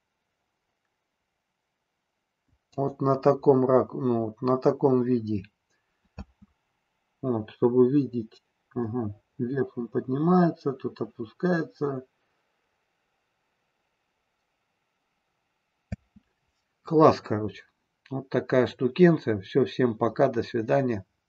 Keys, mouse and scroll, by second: 2.7 click, 6.1 space, 16.0 space.